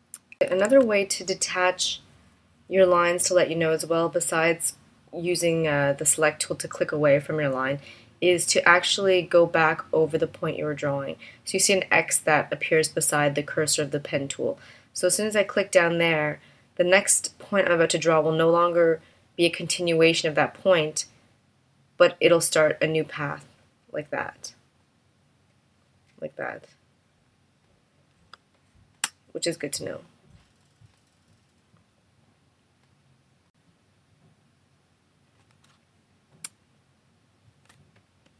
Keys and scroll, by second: 0.6 super+z, 28.3 space, 35.6 space, 37.6 v.